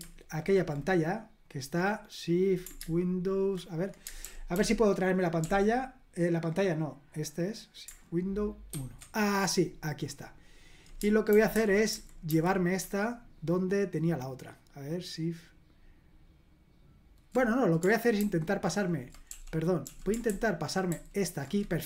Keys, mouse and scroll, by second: 4.2 super+l, 4.5 super+l, 5.4 super+l, 8.7 shift+super+1, 11.3 super+h, 11.6 super+h, 11.9 super+h, 12.3 super+h, 18.2 shift+super+h, 20.9 s.